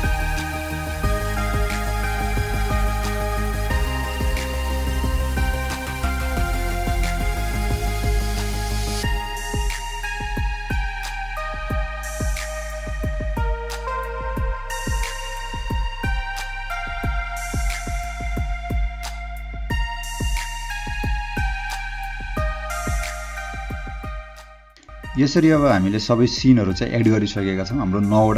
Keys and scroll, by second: 0.9 space, 1.2 h, 1.7 space, 2.0 Delete, 2.1 h, 11.1-12.7 typing, 14.6 space, 14.9 m, 16.0 h, 16.4 m, 17.6 h, 17.9 h, 18.8 m, 19.4 h, 20.4 o, 21.6 space.